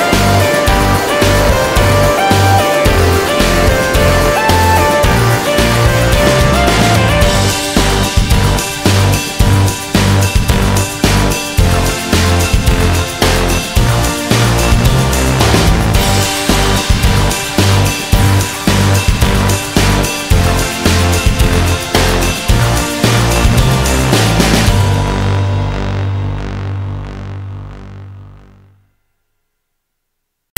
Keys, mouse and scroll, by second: 0.3 middle click, 0.3 scroll down 1, 1.2 middle click, 1.8 scroll down 1, 2.3-2.7 scroll down 1, 3.3 middle click, 3.3 scroll down 1, 4.8 scroll up 1, 6.1 click, 7.1 click, 8.6 click, 10.6 click, 11.8 click, 15.1 click, 15.5 middle click, 16.0 scroll up 1, 17.7 scroll up 1, 19.0 scroll up 1, 20.9 middle click, 21.6 click, 24.6 click, 25.6 click, 27.6 click, 27.7 middle click, 28.3-29.0 scroll down 1, 29.6 click, 30.4 click.